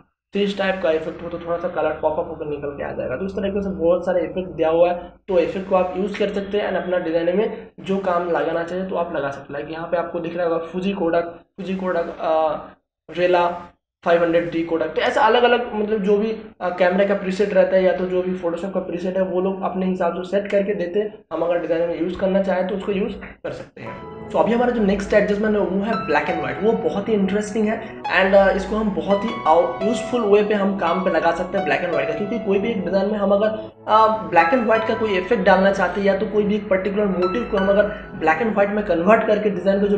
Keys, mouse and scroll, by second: 2.0-2.9 scroll down 1, 7.7 click, 13.6 click, 21.8 click.